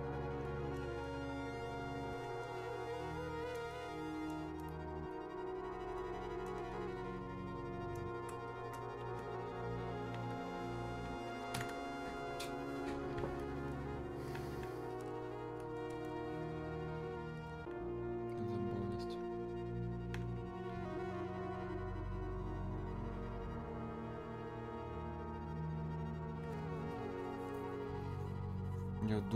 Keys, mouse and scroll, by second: 0.5-12.4 drag, 14.3-21.7 alt+drag.